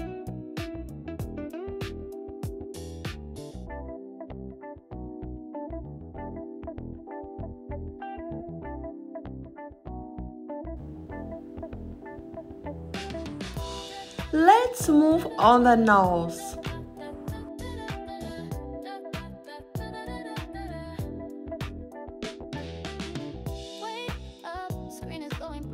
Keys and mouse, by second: 0.2 click, 2.5 click, 3.6 click, 5.2 shift+click, 6.3 g, 7.5 click, 8.3 click, 9.5 g, 11.4 f, 14.4 Return, 18.1 g, 21.0 click, 22.1 click, 24.4 click.